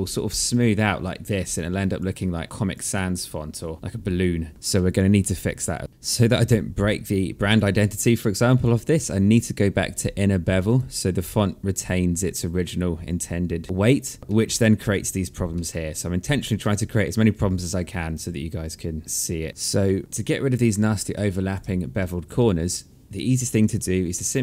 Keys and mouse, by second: 0.7 alt+click, 1.1 alt+middle click, 2.0 alt+click, 2.4 alt+middle click, 3.7 alt+click, 5.9 click, 7.1 alt+middle click, 10.0 click, 14.2 alt+middle click, 14.9 alt+middle click, 15.9 alt+middle click, 19.5 alt+click, 19.6 alt+middle click, 20.4 alt+click, 21.2 alt+middle click.